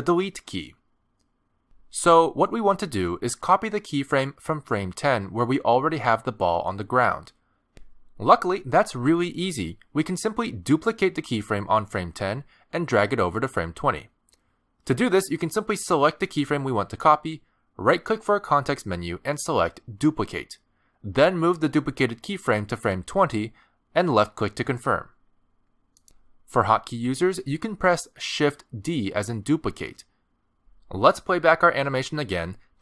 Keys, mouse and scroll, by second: 5.8 click, 7.8 click, 8.6 middle click, 9.9 middle click, 12.4 click, 16.5 right click, 28.3 shift+d.